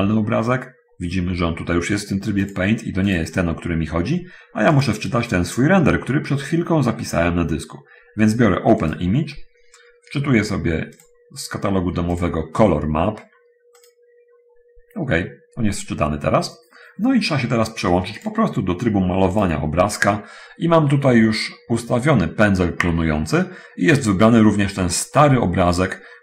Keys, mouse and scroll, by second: 0.7-1.3 scroll down 4, 2.7 click, 3.4 click, 5.0 click, 8.8 click, 11.3 click, 12.5 click, 14.1 click, 15.9-16.2 scroll up 1, 18.5 click, 19.5 click, 21.5 scroll up 1, 25.2 middle click, 26.1 scroll up 1.